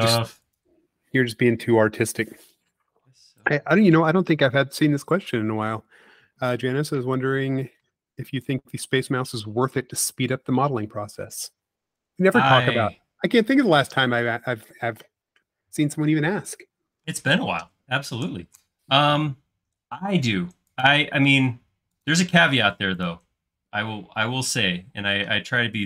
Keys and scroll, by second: 6.6 space, 8.1 p, 16.4 space, 18.4 c, 22.7 space, 24.9 m.